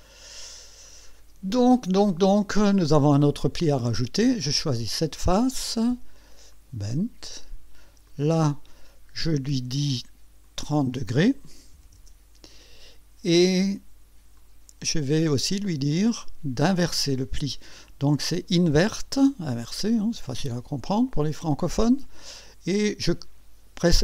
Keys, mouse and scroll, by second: 0.0 click, 4.7 click, 6.5 click, 8.1 click, 10.4 click, 11.7 KP_3, 11.9 KP_0, 14.4 click, 15.9 click, 19.2 click, 19.8 click, 21.3 click, 23.9 Return.